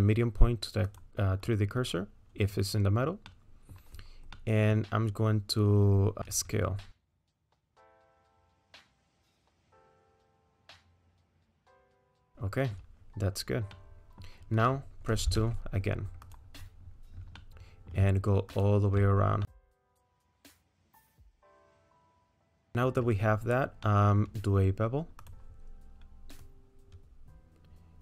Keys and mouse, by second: 3.3 middle click, 4.4-6.2 middle drag, 7.1 s, 11.2 click, 11.2 right click, 11.4 middle click, 12.4 click, 12.4 right click, 13.7 middle click, 15.2 2, 17.4 middle click, 19.5 middle click, 20.1 middle click, 20.6 ctrl+click, 20.7 middle click, 21.3-22.4 middle drag, 22.7 middle click, 23.9 middle click, 25.2 click, 26.5-28.0 drag.